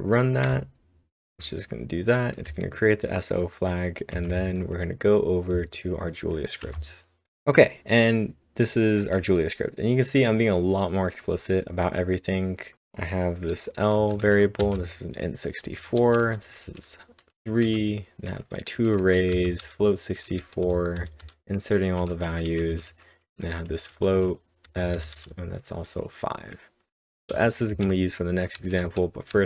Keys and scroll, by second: 0.5 Return, 3.2-3.9 typing, 4.2 ctrl+1, 6.7 ctrl+Tab, 9.0 typing, 14.0-18.2 typing, 21.8-25.7 typing, 27.5-28.2 typing.